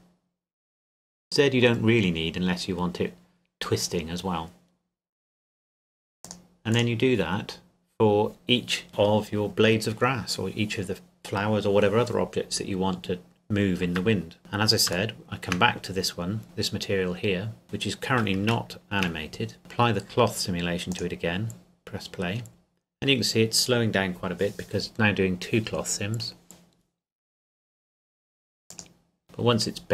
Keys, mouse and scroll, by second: 6.2 click, 14.4 right click, 15.1 shift+middle click, 15.8-16.4 scroll up 2, 16.4 middle click, 16.7-17.6 scroll up 2, 17.6 click, 18.7 shift+middle click, 19.6 click, 28.7 click.